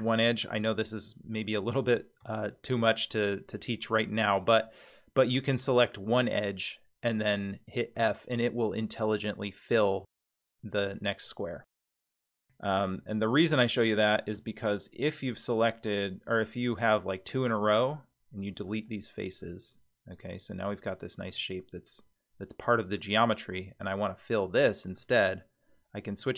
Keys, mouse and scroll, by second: 0.5 ctrl+z, 1.6-2.0 middle drag, 2.3-2.7 shift+middle drag, 2.9-3.9 middle drag, 4.2-4.6 scroll up 3, 4.6 middle click, 8.0 f, 11.2-11.8 scroll down 1, 11.8 middle click, 11.8 scroll down 2, 13.0 3, 13.8 click, 14.6 shift+click, 17.6 x, 19.4-20.7 middle drag, 21.3-23.0 middle drag, 24.4 middle click, 26.2 2.